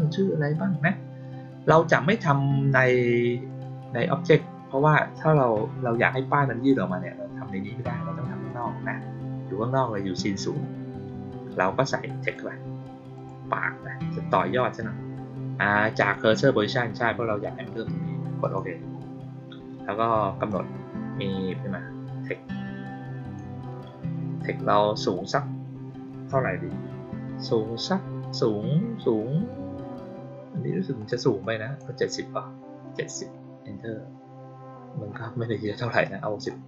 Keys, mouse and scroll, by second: 3.4 click, 8.4 click, 12.1 click, 13.1 click, 18.3 click, 20.4-23.3 drag, 30.9 click, 31.3 click, 36.0-36.3 drag.